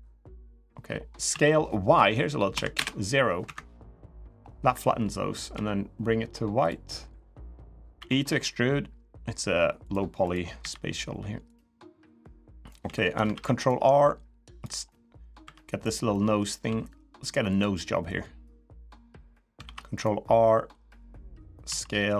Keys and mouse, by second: 1.0 s, 2.5 Delete, 3.7 middle click, 5.3 g, 7.2 middle click, 7.7 e, 10.3 l, 11.3-12.4 drag, 12.6 3, 13.1 ctrl+r, 14.6 middle click, 15.2 3, 15.6 click, 15.9 middle click, 16.4 s, 17.9-19.0 drag, 19.4 ctrl+r, 21.4 s.